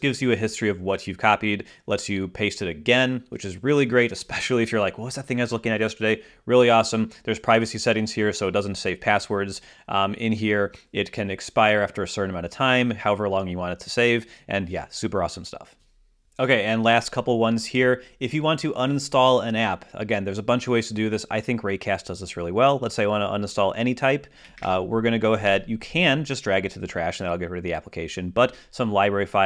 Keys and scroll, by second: 24.5 alt+space, 25.6 Escape.